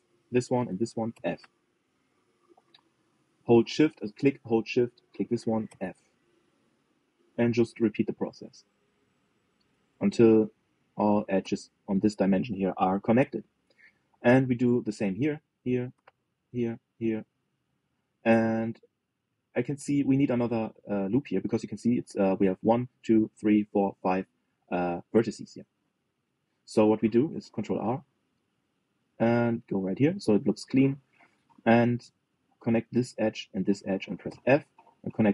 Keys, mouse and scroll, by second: 0.2 f, 0.7 click, 1.3 shift+click, 1.8 f, 4.8 click, 5.6 shift+click, 6.4 f, 6.9 shift+middle click, 7.5 click, 8.0 shift+click, 8.5 f, 8.8 middle click, 9.5 click, 10.2 shift+click, 10.6 f, 11.6 shift+click, 12.1 f, 14.2-15.7 middle drag, 15.7 click, 16.2 shift+click, 16.7 f, 17.2 click, 17.6 shift+click, 17.9 f, 18.4-24.5 middle drag, 26.2-28.3 middle drag, 28.3 ctrl+r, 33.1 click, 33.6 middle click, 34.1 shift+click, 35.0 f.